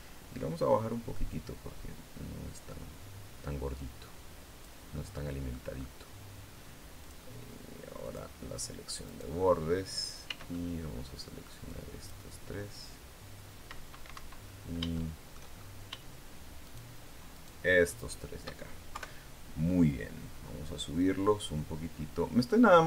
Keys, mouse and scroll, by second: 1.1-4.6 drag, 4.7 middle click, 5.6 scroll up 2, 6.8 click, 7.8 click, 8.8 right click, 10.0 c, 10.3-11.4 middle drag, 11.4 click, 13.9 Escape, 14.2 scroll up 1, 14.7 shift+middle click, 15.3-15.6 shift+scroll up 1, 16.4 shift+right click, 17.1 shift+right click, 17.8 shift+right click, 18.7 KP_3, 19.3-19.6 scroll down 2, 20.8-22.8 drag.